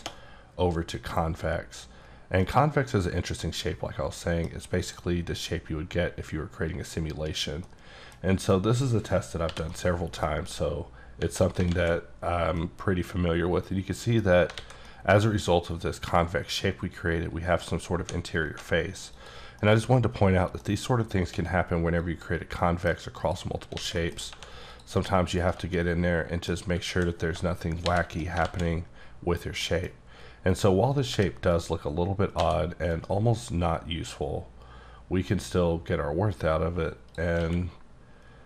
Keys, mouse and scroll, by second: 1.0 click, 2.4-4.6 middle drag, 4.8 click, 5.4-7.0 scroll up 6, 7.0-7.6 scroll down 3, 7.6 middle click, 8.2 scroll down 1, 8.5 middle click, 9.5 /, 9.7 middle click, 10.7-11.2 scroll up 5, 11.7 alt+z, 12.0-12.6 scroll down 6, 12.6-14.5 middle drag, 14.6 alt+a, 14.9-17.2 middle drag, 17.7 scroll up 1, 18.4 typing, 19.2 click, 19.6 middle click, 20.6 scroll down 1, 20.8-21.3 scroll up 1, 21.3 x, 22.0 click, 22.6 middle click, 23.2 click, 23.6 scroll down 2, 23.8 a, 24.0 middle click, 24.2 scroll up 1, 24.3 1, 24.7 click, 24.9 g, 25.4 right click, 25.8 middle click, 26.9 a, 27.9 shift+n, 28.7 z, 29.6 middle click, 30.9 click, 31.1 g, 31.6 right click, 32.1-32.4 scroll down 2, 32.4 a, 32.9 right click, 34.1 click, 37.4 q.